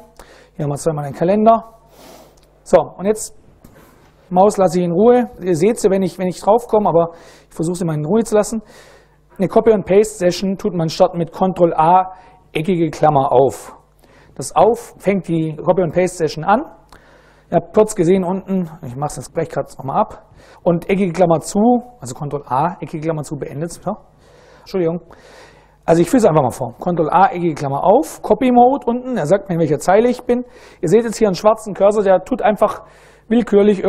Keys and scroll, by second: 11.2 ctrl+a, 12.7 [, 19.3 Escape, 19.5 Escape, 26.7 ctrl+a, 27.2 [, 29.0 Up, 29.2 Up, 29.5 Up, 31.5 Left, 32.2 Left, 32.7 Up, 33.0 Up, 33.2 Up.